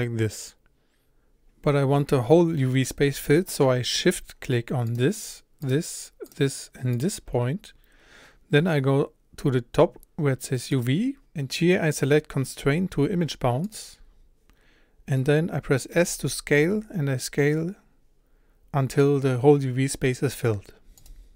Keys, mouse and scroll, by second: 0.6 click, 2.6 click, 4.9 shift+click, 5.7 shift+click, 6.3 shift+click, 7.0 shift+click, 16.0 s.